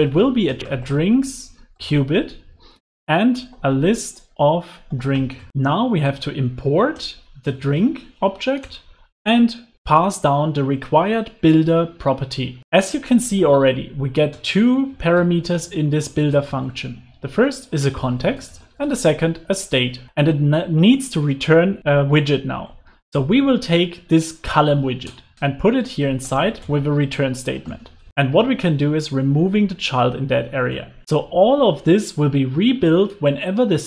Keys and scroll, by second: 0.5 Return, 0.6 alt+BackSpace, 2.1 Return, 5.5 alt+Return, 13.4 alt+shift+Left, 16.6 alt+shift+Right, 22.7 alt+Up, 25.3 super+x.